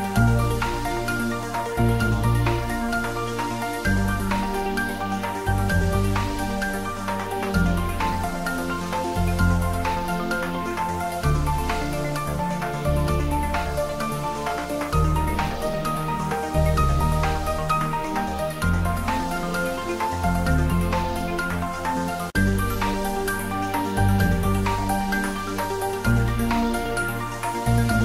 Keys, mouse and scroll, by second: 2.8 click, 3.6 scroll down 1, 4.0-6.6 middle drag, 6.8-8.5 scroll down 1, 8.5-9.8 middle drag, 9.8 click, 10.2 scroll down 1, 11.3 g, 11.9 click, 12.5 ctrl+z, 13.7 click, 14.4 g, 15.8 click, 16.2-16.5 scroll down 1, 16.5 middle click, 17.3-17.6 scroll up 2, 21.4 click, 22.0-22.5 scroll down 1, 22.9 s, 23.5 click, 23.9 shift+d, 24.1 r, 24.8 click, 25.2 g.